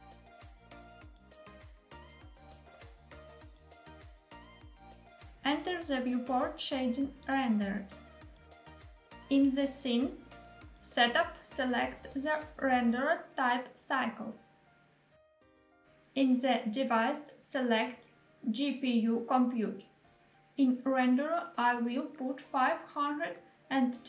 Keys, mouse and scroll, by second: 6.9 click, 10.4 click, 12.0-13.9 drag, 15.7-17.6 drag, 19.6-22.6 drag.